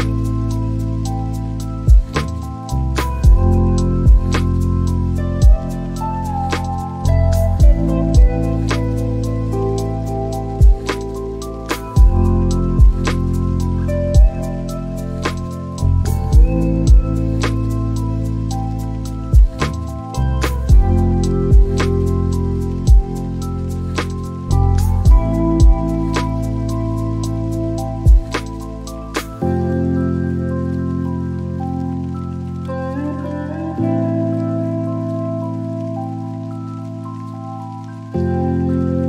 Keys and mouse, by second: 4.8 click, 5.6 click, 6.5 click, 7.3 click, 17.9-20.8 drag, 23.9-27.7 drag, 28.3-31.5 drag, 31.6 click, 32.7 click, 32.9-34.1 middle drag.